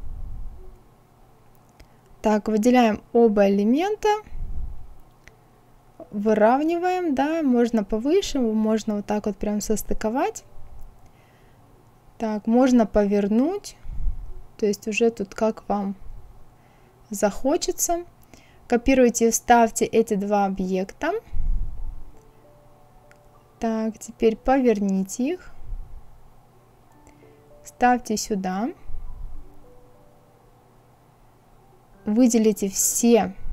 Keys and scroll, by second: 4.3 Up, 18.2 ctrl+c, 18.7 ctrl+v.